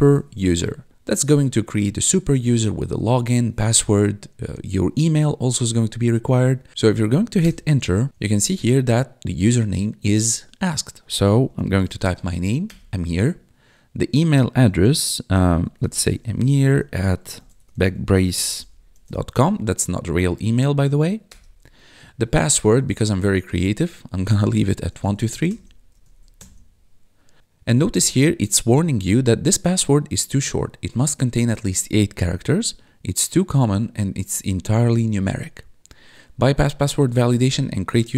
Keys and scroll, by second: 0.0-0.9 typing, 7.4 Return, 11.3-12.5 typing, 12.6 Return, 15.3-19.6 typing, 21.2 Return, 24.6-26.5 typing.